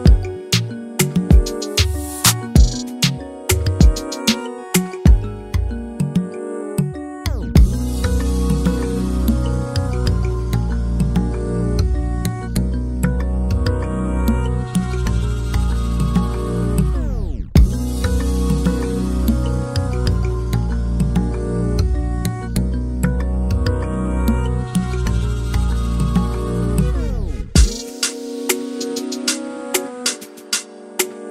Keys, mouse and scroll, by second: 0.0 scroll down 2, 0.2 scroll up 2, 0.5 Tab, 0.9 right click, 1.0 a, 1.4 right click, 1.5 Tab, 2.0 /, 2.3 scroll down 7, 2.6-3.0 middle drag, 3.0 click, 3.1 middle drag, 3.3 shift+click, 3.4 shift+click, 5.0 m, 5.1 Return, 5.3 alt+a, 5.4 scroll down 3, 5.5 middle click, 5.6 scroll up 2, 5.9-7.8 drag, 7.8 alt+a, 8.4-9.4 drag, 9.4 3, 10.1 click, 10.7 scroll up 1, 10.8-11.1 scroll down 8, 11.1 shift+middle click, 11.8 click, 11.9 shift+middle click, 12.2 scroll down 3, 12.5-14.2 shift+middle drag, 14.2 click, 15.7 5, 16.9-19.4 drag, 19.4 scroll down 1, 19.5 scroll up 2, 20.4-22.0 drag, 22.5 click, 22.8 scroll up 2, 23.0 scroll down 1, 23.1 middle click, 23.9 scroll up 1, 24.0 middle click, 24.9 click, 25.7 scroll down 1, 25.8 middle click, 26.7 click, 27.3 ctrl+z, 28.1 scroll down 6, 28.4 click, 28.5-28.9 scroll up 3, 28.6 alt+a, 28.7 shift+middle click, 28.9 middle click, 29.1 shift+middle click, 29.7 click, 29.9 scroll down 1, 30.1 shift+middle click, 30.2 scroll up 2, 30.3 middle drag, 30.6 scroll down 1, 30.7-31.3 shift+middle drag.